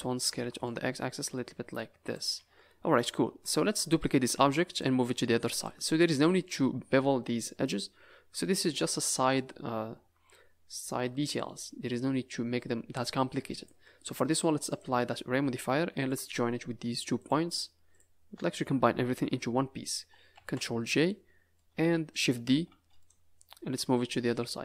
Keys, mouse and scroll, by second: 0.5 s, 2.3 a, 2.5 a, 2.9 middle click, 3.6-4.3 scroll up 5, 4.3 z, 5.0-5.5 scroll up 2, 5.5 click, 6.4-7.3 scroll up 2, 13.5 click, 14.6 click, 16.0 shift+click, 17.1 click, 17.9 shift+click, 20.3 ctrl+j, 20.9 s, 20.9 scroll down 7, 21.5 middle click, 22.6 shift+d, 23.7 click.